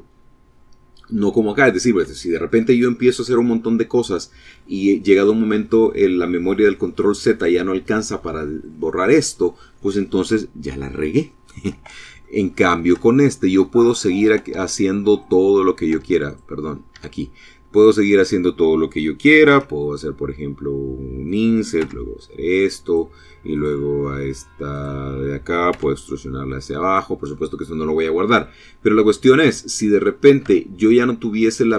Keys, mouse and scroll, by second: 0.7 scroll down 2, 1.3 shift+middle click, 3.1 middle click, 11.3 shift+middle click, 12.2 shift+middle click, 12.8 middle click, 13.7 Tab, 14.3 click, 15.1 Tab, 15.4 click, 15.7-16.9 middle drag, 16.1 Tab, 16.9 click, 17.1-18.6 middle drag, 18.7 i, 20.5 click, 20.9 e, 22.0 click, 22.7 click, 23.8 click, 24.9 e, 25.9 click, 26.4-29.3 middle drag, 29.7 Tab, 30.8 click.